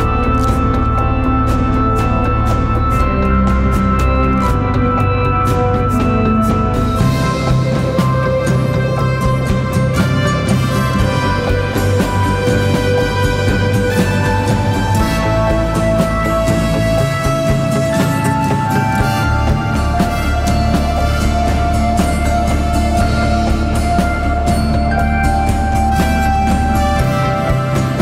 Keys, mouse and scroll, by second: 0.0 double click, 8.1 scroll up 1, 8.3 scroll down 1, 8.3 scroll up 1.